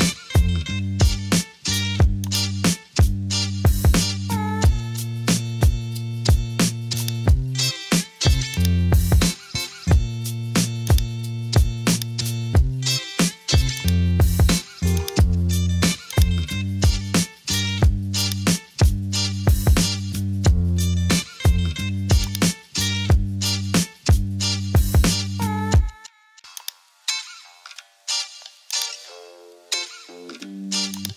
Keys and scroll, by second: 20.0-20.4 typing, 22.8-23.3 typing, 25.0 super+t.